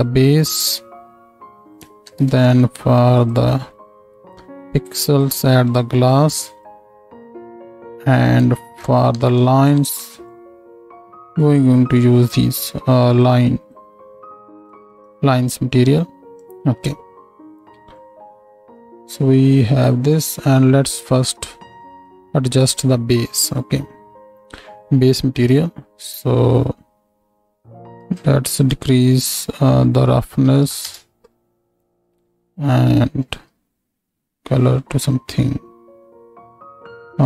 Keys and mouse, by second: 2.1 shift+d, 3.3-5.0 middle drag, 5.0-9.8 drag, 9.2 shift+d, 9.8 middle click, 10.3-14.6 drag, 18.0-20.8 drag, 22.7-28.0 drag, 32.2-37.2 drag.